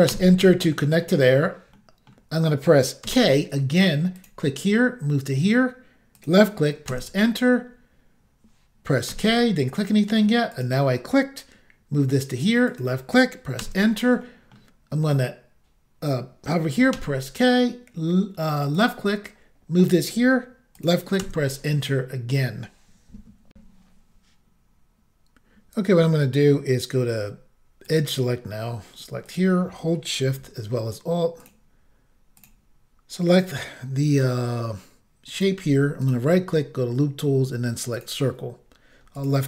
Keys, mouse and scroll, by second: 0.1 Return, 0.7 middle click, 1.8 middle click, 3.1 k, 4.2 click, 4.3 click, 6.2 click, 6.3 click, 6.9 Return, 9.1 k, 10.6 click, 11.6 click, 12.7 click, 12.8 click, 13.6 Return, 14.2 middle click, 16.9 k, 18.8 click, 20.8 click, 20.8 click, 21.2 Return, 23.5 Insert, 27.9 click, 27.9 click, 29.3 click, 29.4 click, 31.4 alt+click, 31.5 alt+click, 32.4 alt+click, 32.5 alt+click, 33.3 alt+click, 33.4 alt+click, 35.4 alt+click, 35.4 alt+click, 36.0 right click, 36.1 right click, 38.0 click, 38.0 click, 39.2 click, 39.3 click.